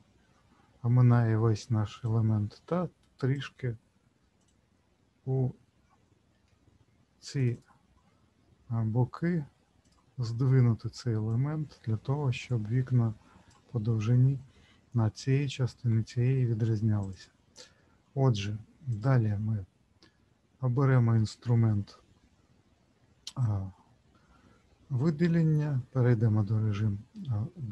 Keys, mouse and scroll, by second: 2.0 click, 4.4 click, 6.4 w, 7.4 alt+click, 7.5 alt+click, 9.8 click, 11.2 click, 17.0 click, 19.0 click.